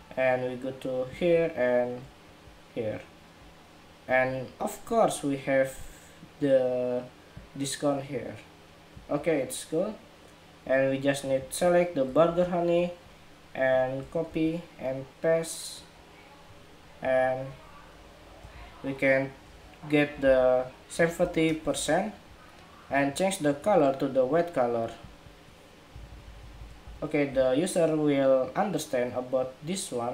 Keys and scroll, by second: 12.0 super+c, 14.0 shift+super+v, 18.2 super+a.